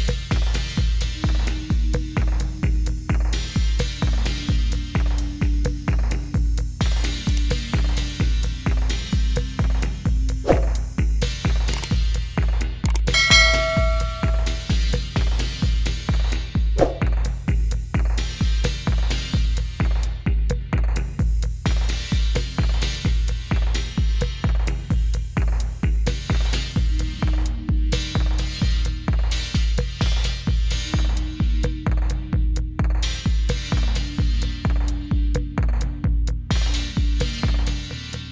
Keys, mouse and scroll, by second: 0.3 click, 0.7 middle click, 1.6 click, 3.5 click, 4.3 click, 4.9 click, 5.8 click, 6.5 click, 7.1 click, 7.9 click, 8.8 click, 9.6 click, 10.7 d, 11.3 click, 12.0 d, 12.4 click, 12.9 d, 14.1 click, 14.3 d, 15.0 click, 15.7 d, 16.0 click, 16.4 d, 16.8 click, 17.2 click, 18.5-20.3 click, 21.5 click, 22.6 click, 22.9 click, 24.4 click, 25.1 right click, 25.4 click, 25.7 right click, 26.1 click, 26.5 right click, 26.7 click, 27.0 right click, 27.3 click, 28.7 right click, 29.3 click, 29.7 right click, 30.1 click, 31.3 click, 31.7 click, 32.4 click, 34.3 click, 36.0 click, 37.3 click.